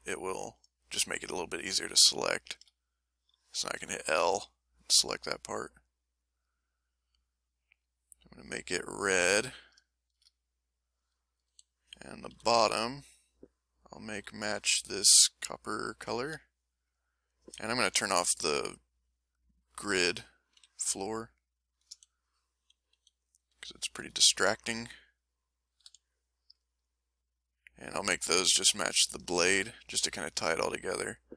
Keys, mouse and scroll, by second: 0.9 middle click, 2.1 ctrl+shift+Tab, 2.6 Tab, 2.9 middle click, 3.8 l, 4.1 middle click, 5.7 middle click, 7.0-9.2 drag, 9.5 click, 9.9-11.4 shift+drag, 11.5 shift+a, 12.3 l, 12.6 shift+middle click, 14.1 l, 15.8 s, 16.1 s, 16.2 s, 16.2 s, 16.9 click, 17.9 n, 18.9 click, 20.5 n, 21.2 middle click, 21.9-24.4 typing, 25.8 s, 26.5 click, 27.0-28.6 drag, 29.5 ctrl+click, 29.8 ctrl+middle click, 30.0 ctrl+middle click, 30.5 ctrl+middle click.